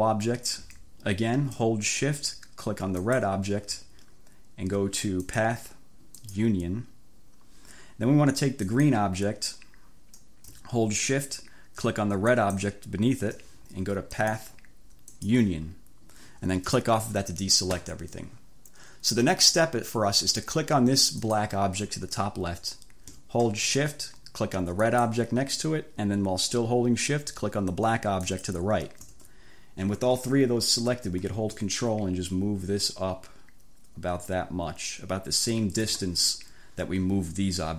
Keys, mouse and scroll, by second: 3.1 shift+click, 5.3 click, 6.3-6.7 scroll up 1, 8.8-9.1 scroll up 1, 12.3 shift+click, 14.3 click, 15.1 click, 16.8 click, 21.3 click, 24.9 shift+click, 28.3 shift+click, 31.7-36.1 ctrl+drag.